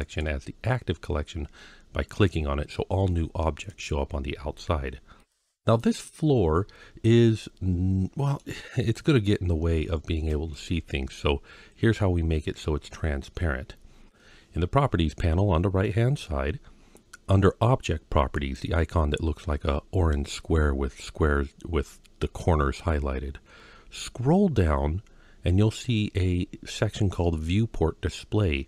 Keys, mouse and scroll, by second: 3.5 click, 5.0 click, 5.6-8.2 middle drag, 8.6-9.5 scroll up 2, 9.5-9.8 scroll down 1, 10.3-11.0 middle drag, 18.2 click, 23.4-27.1 scroll down 6.